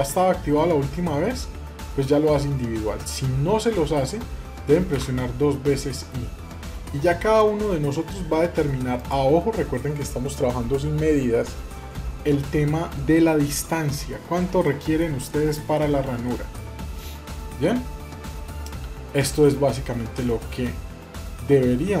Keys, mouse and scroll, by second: 13.8-14.4 scroll up 3, 14.4-16.3 middle drag, 16.4 scroll down 2, 16.7-22.0 middle drag.